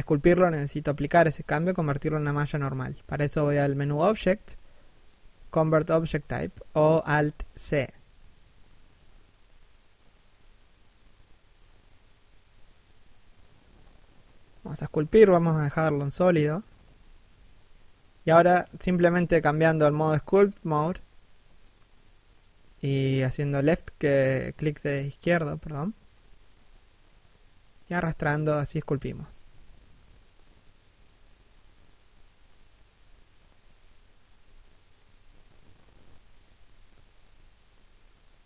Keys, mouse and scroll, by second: 2.1 scroll up 1, 2.2 z, 2.5 shift+middle click, 11.0 right click, 11.9 middle click, 12.7 KP_3, 12.9 KP_1, 19.9 click, 28.6 middle click, 29.7 3, 30.0 1.